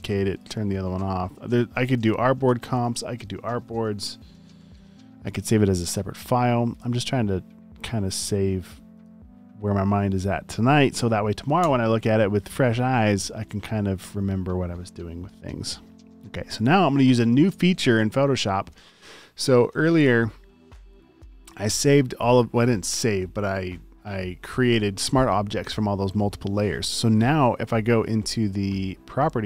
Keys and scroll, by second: 4.1-5.0 typing, 11.6 BackSpace.